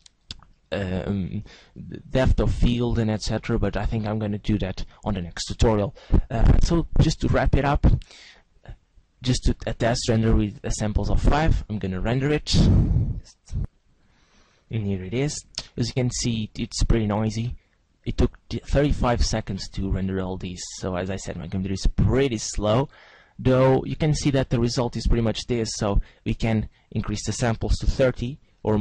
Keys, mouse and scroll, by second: 7.2 click, 8.8-9.1 scroll down 1, 10.2-11.8 scroll up 3, 11.8 click.